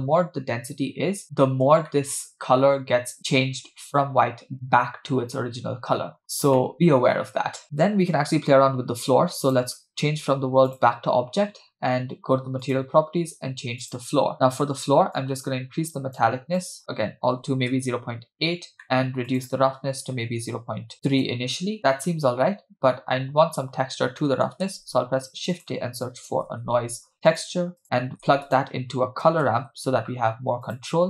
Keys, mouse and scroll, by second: 1.2 scroll up 2, 2.0-2.3 shift+middle drag, 2.3-3.1 scroll up 3, 6.2 scroll down 2, 6.6 shift+middle click, 7.1 shift+middle click, 9.4-10.8 drag, 11.7-12.2 scroll down 1, 12.2 scroll down 1, 12.6 click, 13.8 click, 15.2-16.2 drag, 16.6-17.8 drag, 18.8 middle click, 19.3-21.1 drag, 24.2 middle click, 24.8 shift+a, 27.8 drag, 28.1 shift+a.